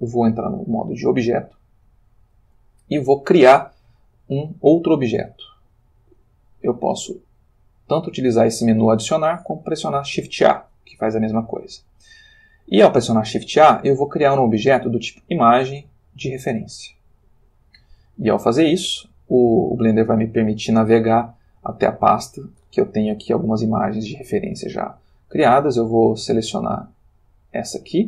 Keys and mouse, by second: 0.9 click, 10.3 shift+a, 17.2 click, 19.7 click, 21.8 click, 26.5 click, 27.5 click.